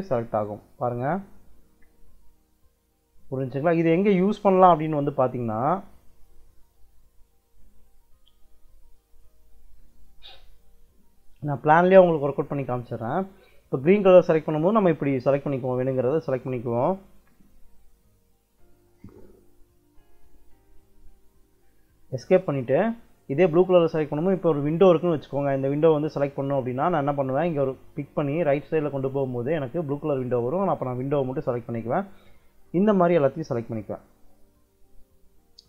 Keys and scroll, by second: 3.3 Escape, 21.7 Escape.